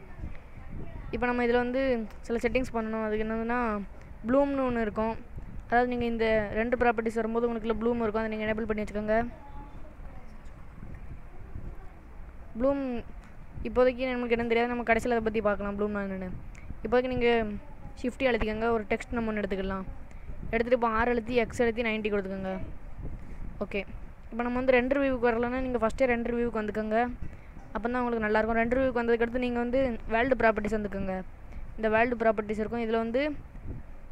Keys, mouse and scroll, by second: 1.9 click, 3.1 click, 8.5 click, 9.3 middle click, 11.9 click, 12.8 middle click, 14.7 middle click, 18.0 shift+a, 20.3 middle click, 20.7 scroll up 1, 21.7 r, 24.9 middle click, 28.9 middle click, 32.0 click.